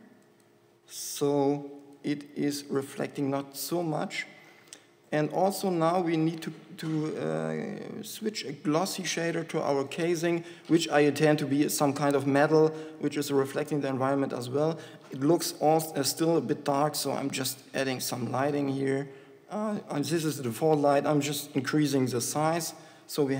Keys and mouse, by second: 2.1-7.9 drag, 15.6 KP_7, 15.8 KP_7, 18.7 g.